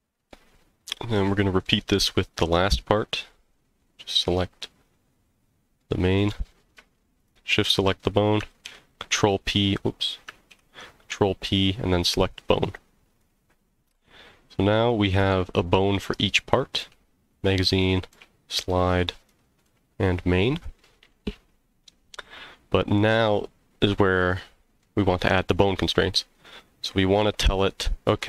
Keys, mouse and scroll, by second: 1.2 middle click, 4.0 click, 5.8-6.3 middle drag, 7.2 shift+click, 8.6 ctrl+p, 10.7 ctrl+p, 12.7 click, 13.1 click, 13.9 g, 15.8 right click, 16.5 click, 16.8 g, 17.3 right click, 17.8 click, 18.1 g, 18.7 right click, 19.2 click, 19.6 g, 20.5 click, 20.5 right click, 21.5-22.1 middle drag, 22.4 scroll down 1, 23.0-24.8 middle drag.